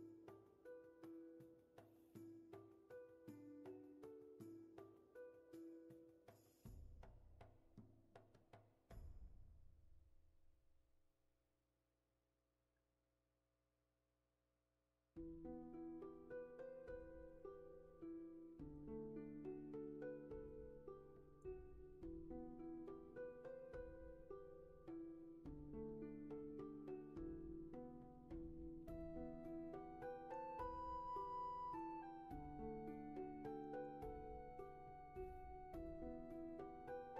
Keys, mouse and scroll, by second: 0.0 scroll down 1, 0.9 ctrl+z, 1.9-3.7 scroll up 1, 5.2-5.5 scroll down 1, 6.1 ctrl+z, 6.6-8.4 scroll up 1, 9.1 scroll down 1, 11.9-12.6 scroll down 1, 12.6 space, 18.0-18.3 scroll up 1, 18.6 scroll up 1, 23.1 ctrl+z, 24.6 scroll down 1, 29.8 scroll up 1, 31.6 scroll up 1, 32.9 ctrl+z, 35.3 ctrl+z.